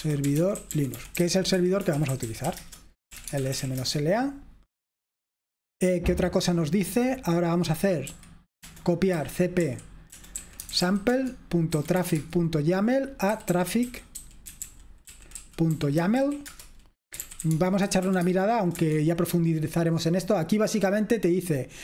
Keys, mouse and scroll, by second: 0.0-4.5 typing, 8.2 typing, 9.4-18.8 typing, 21.4-21.8 typing.